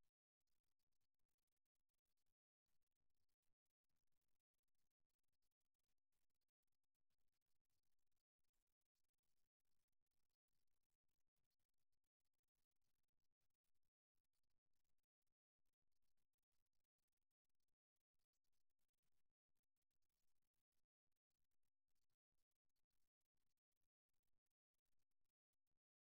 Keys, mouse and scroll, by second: 0.6-1.7 middle drag, 3.2-5.0 right drag, 5.0-6.4 middle drag, 6.4 g, 10.6-12.4 drag, 11.9 g, 13.6-15.4 drag, 14.2 g, 17.0 click, 17.5-18.9 right drag, 17.5 g, 19.2-21.2 right drag, 19.6 g, 21.2 g, 22.7 right click, 23.7 g, 24.8 right click, 25.6 g.